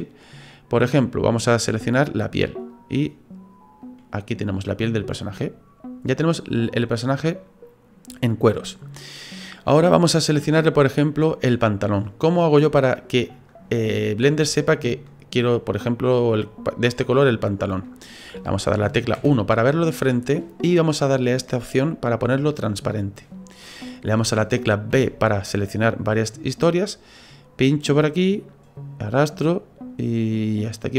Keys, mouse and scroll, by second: 4.8 middle click, 12.5 middle click, 14.3 middle click, 19.1 KP_1, 22.1 click, 24.9 b.